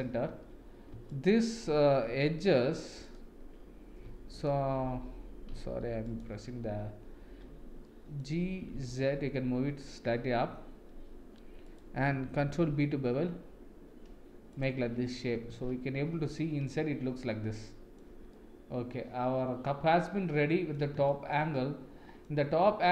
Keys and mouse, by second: 4.3 super+click, 7.8 middle click, 8.6 g, 12.6 ctrl+b, 14.9 Tab, 15.5 shift+z, 16.3-18.0 middle drag, 18.3-20.7 middle drag, 21.1 shift+middle click, 21.5 middle click, 22.5 Tab.